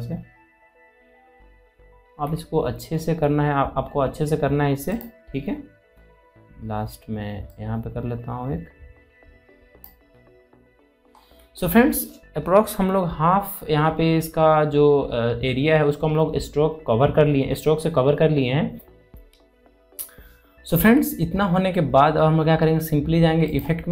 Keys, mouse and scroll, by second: 7.3-11.0 drag, 11.0 alt+scroll down 1, 11.4 scroll up 1, 13.5 scroll up 1, 15.5 scroll up 1, 15.7-17.4 scroll down 1, 18.7 alt+Num_Lock, 18.7-19.6 alt+scroll down 2, 19.6 space, 23.1-23.6 alt+scroll up 2.